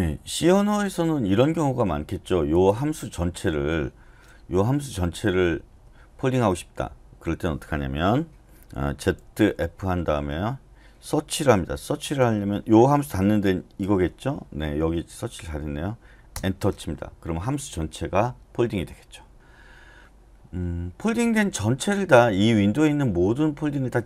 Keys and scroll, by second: 4.3-5.7 typing, 8.9-10.8 typing, 12.2 /, 13.8 }, 16.3 Return.